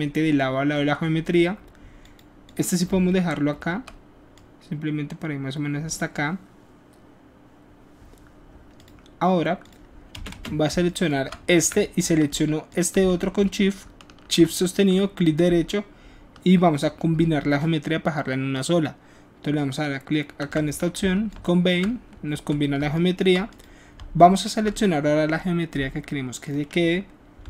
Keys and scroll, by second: 10.4 space, 11.6 q, 22.3 w.